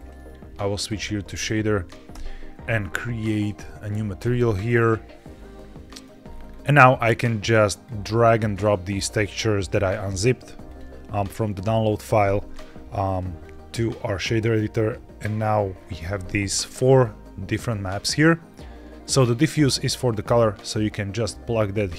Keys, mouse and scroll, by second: 2.0 n, 2.5 click, 3.3-5.1 drag, 5.4 middle click, 6.2-6.5 scroll up 3, 10.6 click, 13.0 click, 13.3 click, 14.2 click, 15.6-16.1 scroll down 2, 16.1 middle click, 16.9 click, 18.1-21.6 drag, 18.9 scroll up 2.